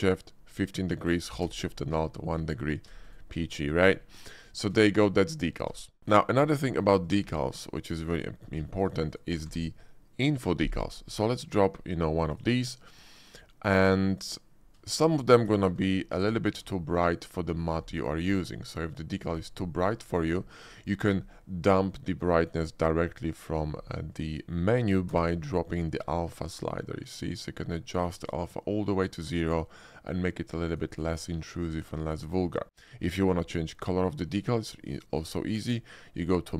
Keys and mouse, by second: 3.1 click, 6.0 KP_Decimal, 6.5 shift+click, 7.0 click, 7.2 x, 7.8 click, 8.0 x, 8.7 shift+click, 9.4 d, 14.9 shift+click, 15.2 middle click, 15.7 f, 16.2 d, 16.6 d, 19.3 click, 20.0 shift+click, 20.7 shift+click, 24.2 shift+click, 24.3 shift+middle click, 25.1 d, 35.1-36.5 drag.